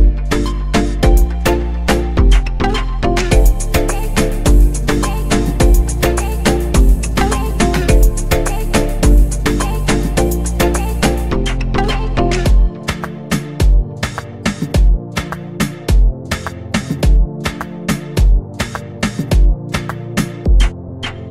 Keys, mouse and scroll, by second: 1.7-2.1 scroll down 4, 2.8 click, 3.6-4.6 scroll down 2, 4.6-6.2 scroll down 6, 6.2-6.9 scroll down 2, 6.9-9.9 drag, 10.6-13.7 drag, 15.0-18.4 drag, 21.2 r.